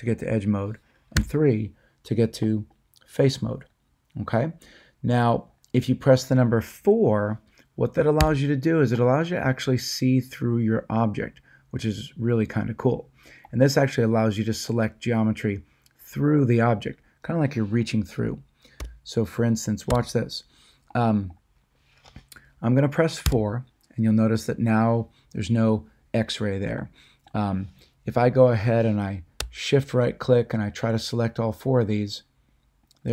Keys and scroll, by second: 1.2 3, 8.2 4, 18.8 a, 19.9 1, 23.2 4.